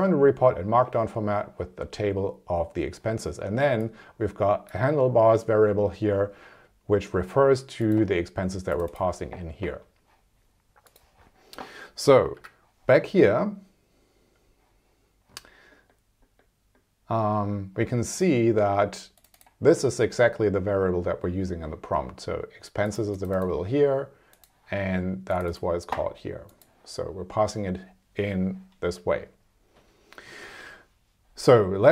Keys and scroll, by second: 12.3 super+s.